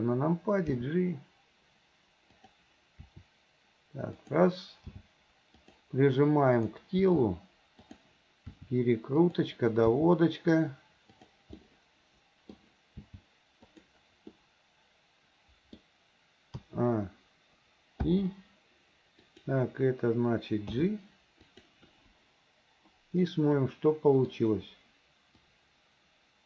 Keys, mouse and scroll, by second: 0.8 g, 3.1 r, 4.9 g, 6.7 click, 7.0 g, 8.5 r, 9.9 g, 11.6 middle click, 12.6 scroll down 1, 13.0 g, 14.4-15.2 scroll up 1, 15.2-15.8 middle drag, 15.8 scroll down 1, 16.7 a, 18.1 i, 19.2 click, 20.7 g, 23.3-24.4 middle drag, 25.5-26.4 drag.